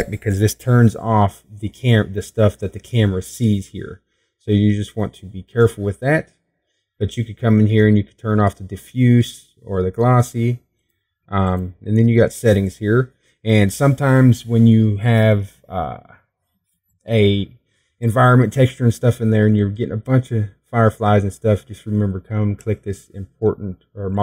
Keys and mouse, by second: 1.5-4.3 drag.